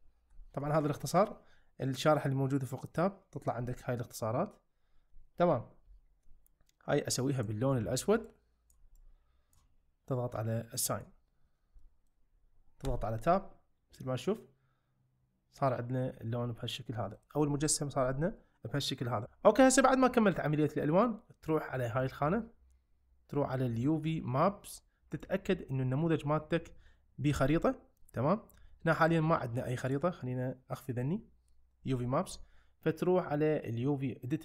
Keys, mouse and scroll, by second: 0.3 `, 3.5 `, 7.4 click, 11.8 middle click, 12.9 Tab, 13.2-17.2 middle drag, 17.5 `, 24.7 click, 25.2 click, 30.7 click.